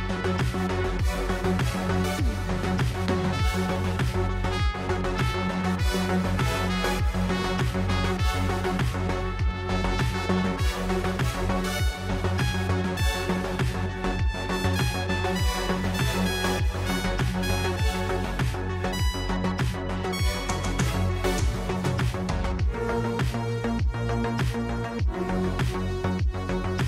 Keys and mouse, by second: 0.0 click, 1.6 shift+a, 3.0 click, 3.1 middle click, 3.1 click, 3.8-4.3 drag, 4.6 click, 5.0 middle drag, 5.9-6.9 drag, 7.2 click, 8.3 click, 9.0 click, 9.8 click, 10.3 click, 12.3 click, 14.4-16.2 drag, 18.2 click, 21.6-22.0 drag, 22.6 drag, 23.2-24.1 drag, 24.8 click.